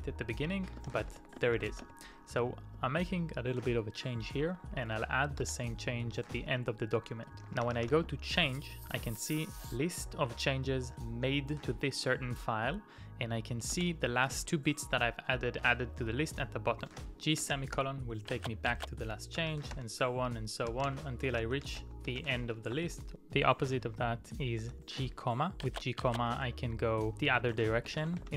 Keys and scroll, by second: 0.9 ctrl+o, 0.9-2.0 typing, 6.1-8.6 typing, 11.4 typing, 13.8 typing, 15.6 typing, 16.7-18.3 typing, 19.4-28.3 typing.